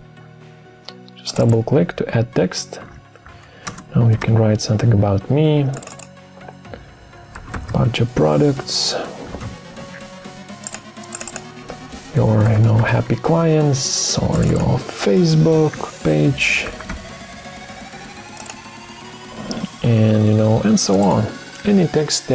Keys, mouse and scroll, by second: 2.6-4.6 typing, 7.1-9.9 typing, 11.9-13.2 typing, 15.1-17.3 typing.